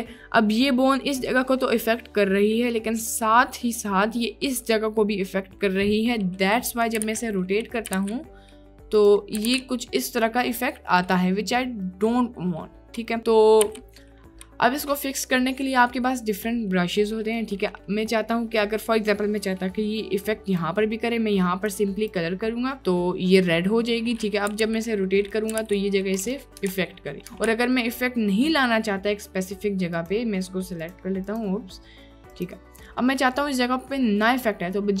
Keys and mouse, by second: 1.7 middle click, 2.9 middle click, 6.2 middle click, 7.0 r, 7.1 x, 7.9 r, 8.0 y, 9.2 middle click, 9.5 click, 9.5 r, 9.5 y, 11.9 click, 13.6 t, 14.0 click, 14.5 click, 17.4 click, 20.7-24.5 drag, 24.5 r, 24.7 x, 25.6 r, 25.7 y, 27.0 ctrl+z, 27.8 ctrl+z, 30.9 click, 33.1 click.